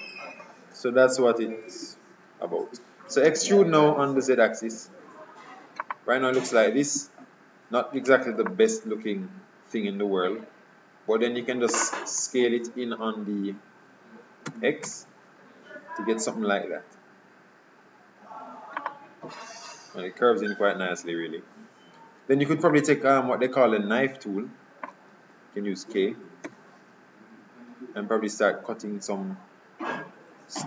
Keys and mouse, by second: 1.9 KP_3, 3.4 e, 7.0 KP_7, 14.5 s, 22.8 middle click, 23.4 middle click, 24.0 middle click, 26.6 k.